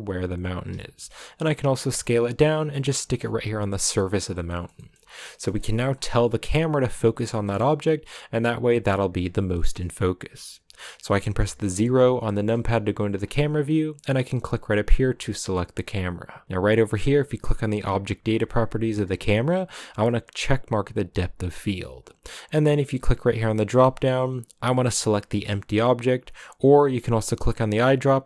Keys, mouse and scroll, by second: 0.0-3.2 typing, 1.9 middle click, 2.9 middle click, 3.9 middle click, 4.2 scroll down 3, 4.4 shift+middle click, 4.9 scroll down 4, 5.2 middle click, 5.8-7.1 scroll down 3, 7.1-12.3 shift+middle drag, 12.3 KP_0, 13.1-14.4 scroll up 2, 14.4-21.1 right drag, 21.1-26.6 drag, 27.3 click.